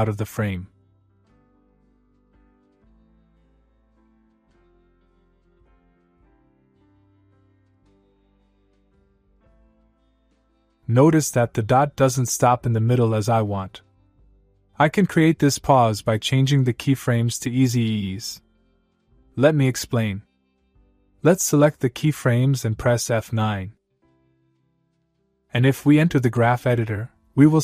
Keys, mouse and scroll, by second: 6.9-8.2 click, 8.3 space, 11.0 space, 11.6 click, 20.6-22.4 click, 24.7 F9, 26.8 click.